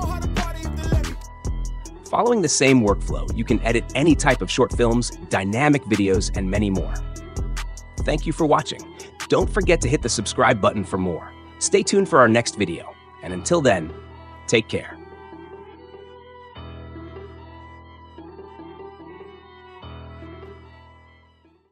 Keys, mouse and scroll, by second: 1.2 space, 5.1 click, 9.2-10.2 drag, 12.3 click, 14.6 click.